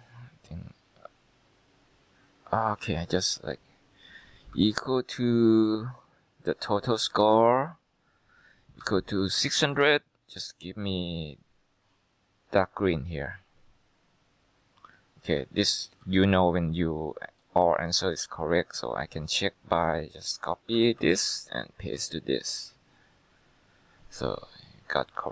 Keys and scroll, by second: 4.7 =, 8.9-10.4 typing, 20.9 ctrl+c.